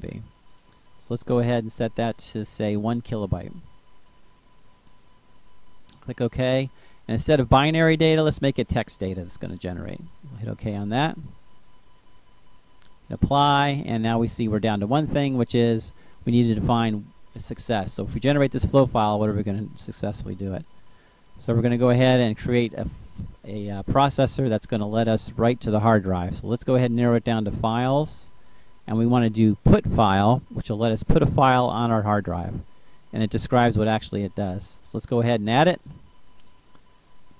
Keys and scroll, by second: 2.4-3.8 typing.